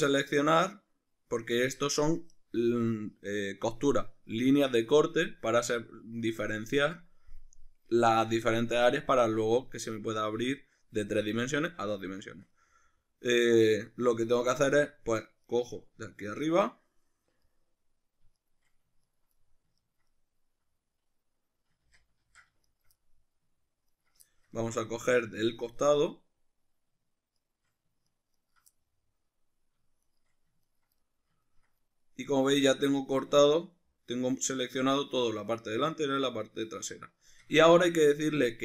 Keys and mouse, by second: 15.5 shift+right click, 16.2 ctrl+right click, 16.6-18.4 middle drag, 18.4 shift+right click, 19.0 ctrl+right click, 19.4-22.6 middle drag, 21.8 ctrl+z, 22.6 shift+right click, 22.9 middle click, 23.9 ctrl+right click, 24.3-27.4 shift+middle drag, 27.4 shift+right click, 28.1 ctrl+right click, 28.4 ctrl+right click, 28.8-30.0 middle drag, 30.0 shift+right click, 30.6 ctrl+right click, 31.0-38.6 middle drag.